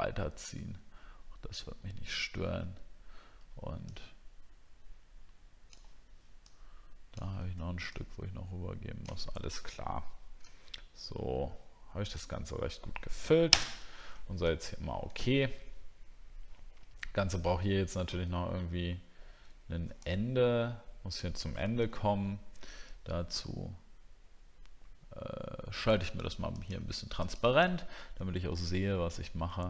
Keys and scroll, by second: 21.8 ctrl+z.